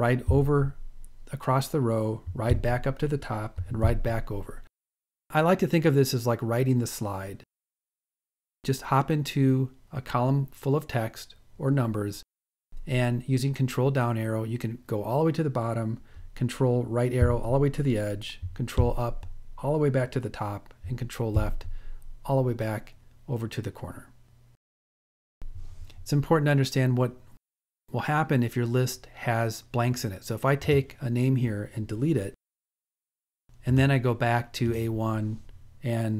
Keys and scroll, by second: 0.0 ctrl+Right, 2.4 ctrl+Up, 4.0 ctrl+Left, 13.0 ctrl+Down, 15.7 ctrl+Right, 18.0 ctrl+Up, 35.0 ctrl+Down.